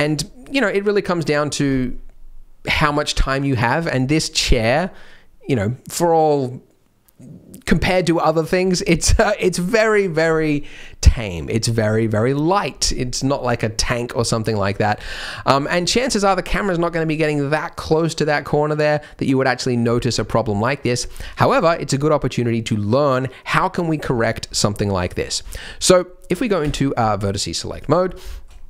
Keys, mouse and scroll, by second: 4.0-4.4 scroll down 8, 4.5 Tab, 8.9-9.6 scroll up 6, 9.6 middle click, 11.8-12.1 scroll up 2, 12.1 middle click, 14.5 middle click, 14.9 Tab, 15.5-16.2 scroll down 10, 15.8 Tab, 16.6 scroll up 3, 20.2-20.7 scroll up 2, 20.7 middle click, 20.7 scroll up 1, 21.1 Tab, 24.1-24.8 scroll up 5, 24.8 middle click, 25.2 scroll down 1, 25.4 shift+middle click, 25.7 scroll up 2, 26.6 1, 27.0 middle click, 27.7 click, 28.0 scroll down 3, 28.3 shift+middle click, 28.5 scroll up 2.